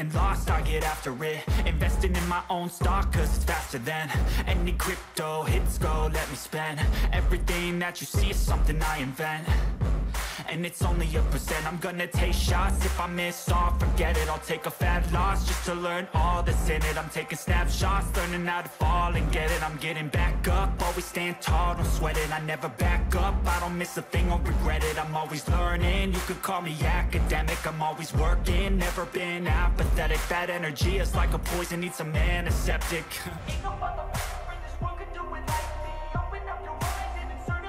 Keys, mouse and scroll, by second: 1.1 shift+click, 3.0-4.3 scroll down 3, 7.0 right click, 12.8 ctrl+t, 13.9 shift+click, 25.2 right click, 30.2 drag, 30.4-31.6 drag.